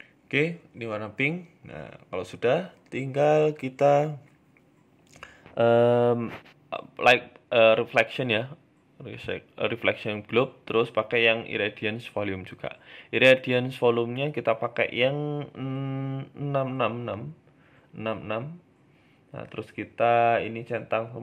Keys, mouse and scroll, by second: 0.9 KP_0, 1.8 middle click, 2.5 scroll down 1, 3.1 KP_0, 4.1-4.6 scroll down 4, 4.6 shift+a, 6.9-7.3 scroll down 3, 7.1 s, 7.9 middle click, 8.3-8.8 scroll down 1, 8.8 scroll down 1, 8.8 shift+a, 12.6 s, 16.2 click, 16.9 click, 19.6 click, 19.9 click, 20.2 click, 20.7 click, 21.1 click.